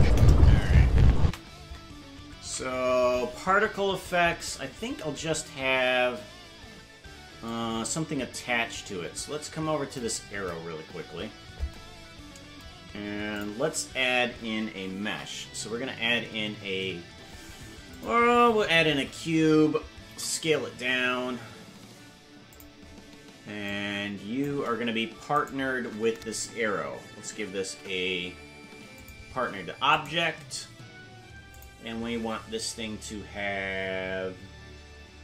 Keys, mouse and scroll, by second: 0.1 KP_0, 1.2 space, 4.6 ctrl+s, 7.5-10.0 drag, 13.3 click, 15.0 shift+a, 20.1 s, 23.6 click, 25.5 shift+right click, 27.7 ctrl+p, 30.1 right click, 31.5 click.